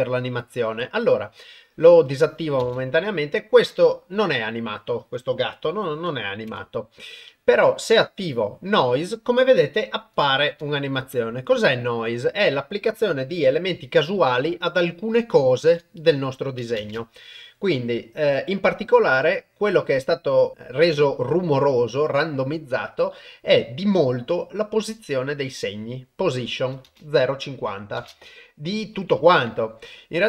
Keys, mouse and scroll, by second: 2.6 shift+space, 6.3 shift+Left, 7.9 click, 10.3 shift+Left, 15.6 shift+Left, 16.8 shift+space, 26.9 shift+space, 28.0 shift+space, 28.9 shift+Left.